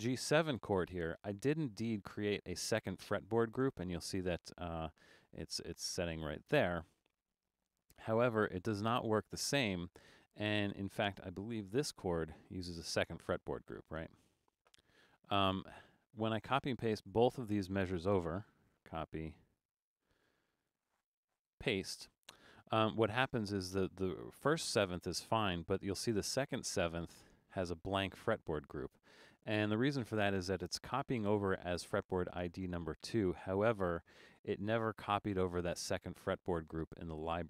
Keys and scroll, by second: 0.0 Return, 12.0 Return, 18.8 super+c, 21.4 super+v, 29.3 Return.